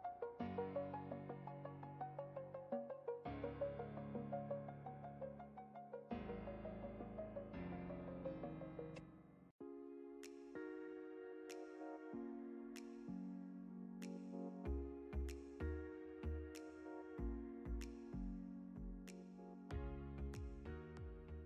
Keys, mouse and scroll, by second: 0.0 ctrl+v, 0.4 click, 2.4 ctrl+t, 2.8-3.3 shift+click, 3.4 click, 3.6 space, 4.0 drag, 7.3 click, 13.5 click, 16.2 ctrl+space, 16.4 ctrl+click, 16.6-17.2 ctrl+space, 17.2 space, 17.3-18.0 click, 17.6 space, 18.7 ctrl+click, 19.0-20.7 ctrl+space, 19.7 space, 19.7 click, 20.0 space.